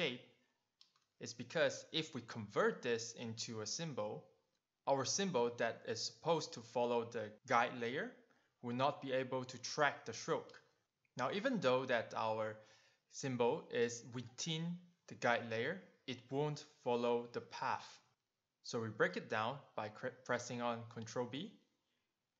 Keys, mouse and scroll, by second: 1.3 click, 3.9 click, 4.6 click, 5.8 click, 12.9 click, 17.3 click, 21.2 ctrl+b, 22.0 click.